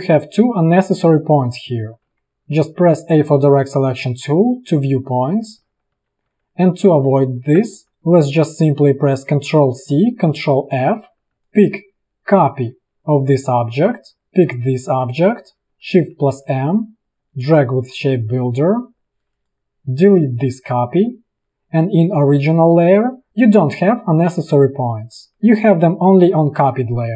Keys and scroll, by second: 1.1 v, 2.2 a, 6.0 ctrl+z, 7.3 ctrl+z, 7.8 v, 9.6 ctrl+c, 10.8 ctrl+f, 11.4 v, 13.6 ctrl+z, 16.5 shift+m, 18.9 v, 20.2 Delete, 24.9 ctrl+z, 25.5 a.